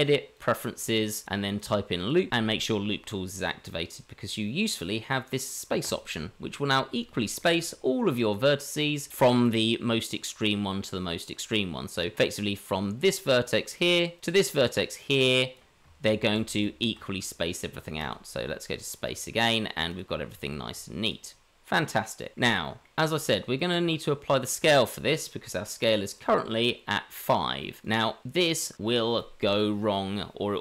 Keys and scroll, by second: 16.2 ctrl+z, 16.5 ctrl+z, 20.2 Tab.